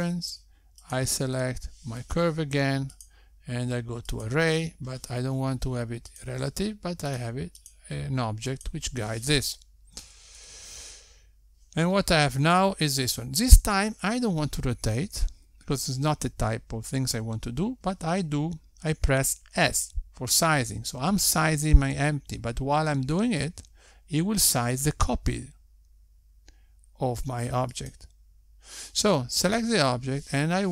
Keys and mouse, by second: 3.7 click, 5.8 click, 9.0 click, 10.0 click, 10.3 click, 15.9 click, 24.7 s.